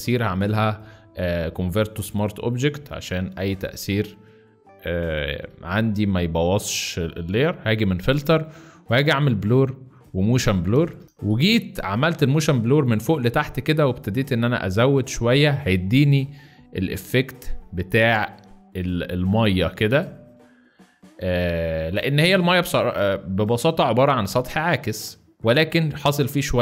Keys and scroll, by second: 3.7 ctrl+z, 10.9 space.